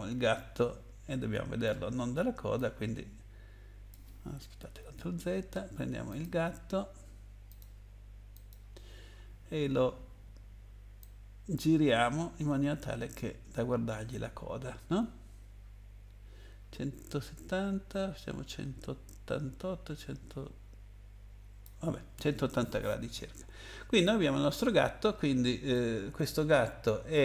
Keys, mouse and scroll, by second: 2.5 click, 4.8 ctrl+z, 6.1 click, 7.5 click, 8.3 click, 11.0 click, 25.7 middle click.